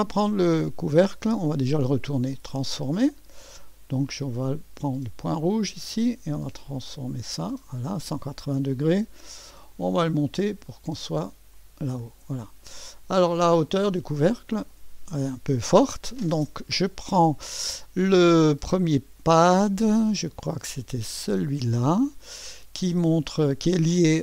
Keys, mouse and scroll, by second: 1.4 right click, 2.3 click, 3.5-4.6 drag, 5.4-7.7 drag, 9.7-10.7 drag, 11.6 click, 12.8 click, 14.2 click, 21.2 click.